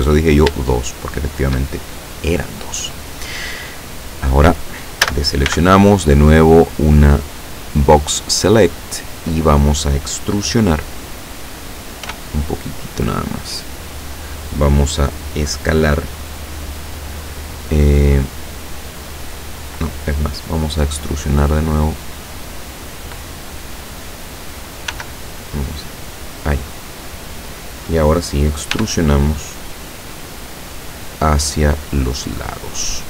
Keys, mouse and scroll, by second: 0.7 shift+middle click, 5.1 a, 5.5 b, 7.1-8.5 drag, 12.1 e, 14.1 click, 25.0 s, 26.5 click, 28.8 e.